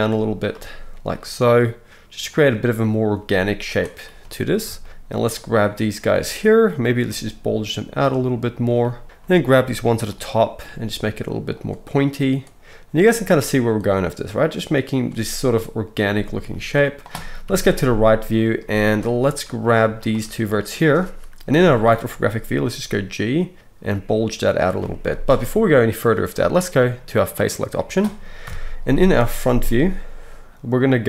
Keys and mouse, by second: 0.5 g, 2.4 click, 3.2 g, 3.7-5.3 drag, 5.3-8.6 middle drag, 7.1 g, 8.6 click, 9.0-12.1 middle drag, 10.6 g, 12.1-13.8 drag, 12.8 g, 13.8 middle click, 14.2-16.0 drag, 15.0 g, 16.0-17.5 middle drag, 17.4 KP_3, 17.5-23.9 right drag, 18.6 z, 19.5 click, 21.5 KP_3, 22.6 g, 23.9-25.1 drag, 23.9 g, 25.1-27.4 right drag, 27.4-31.0 middle drag, 28.4 KP_1.